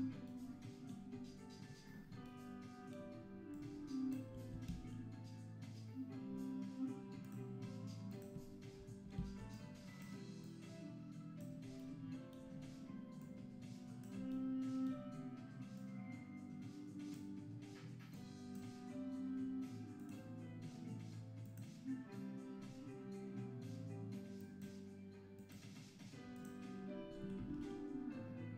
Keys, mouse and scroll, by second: 0.0-0.4 scroll up 5, 2.2 scroll up 5, 3.7 click, 7.5 shift+a, 11.6 click, 13.4 click, 17.3 click, 18.3 click, 20.1 click, 26.6 click.